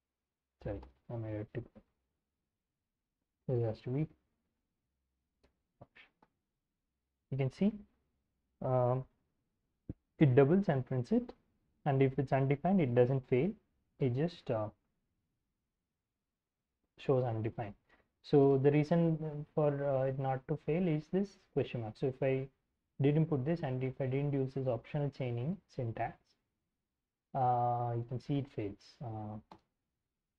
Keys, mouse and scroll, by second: 0.4 Up, 0.7 Return, 1.3-6.2 typing, 4.6 Escape, 12.5-14.8 drag, 17.4-20.7 typing, 22.0 x, 27.6-29.0 typing, 29.0 Up, 29.4 Return.